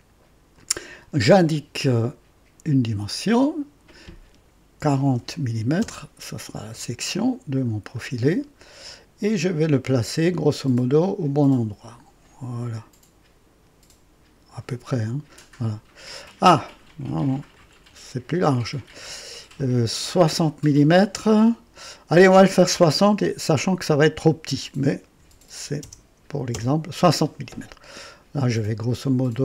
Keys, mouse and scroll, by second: 0.5 click, 3.1 click, 4.8 KP_4, 5.1 KP_0, 5.8 KP_Enter, 6.9 typing, 7.2-7.5 scroll down 1, 7.9 right click, 10.0-15.4 drag, 17.5 click, 25.1 KP_6, 25.8 KP_0, 26.5 Return.